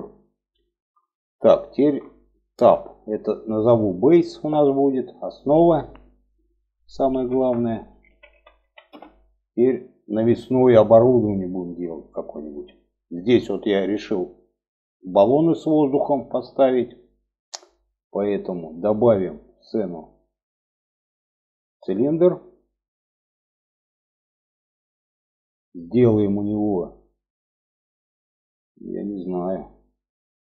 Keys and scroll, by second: 1.9 Tab.